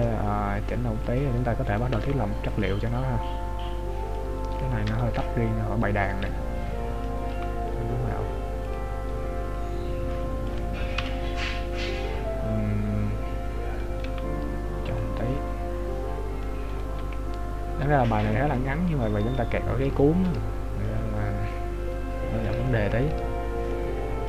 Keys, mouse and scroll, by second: 2.0 right click, 2.1 g, 3.1 middle click, 4.9 KP_7, 6.1 middle click, 7.5 g, 9.0 scroll up 1, 9.5 scroll up 4, 10.2 middle click, 10.2 scroll up 3, 11.0 KP_Decimal, 11.9 middle click, 14.3 g, 15.3 middle click, 16.9 right click, 17.1 g, 18.6 middle click, 20.0 shift+middle click, 21.0 middle click, 22.7 shift+middle click, 23.8 middle click.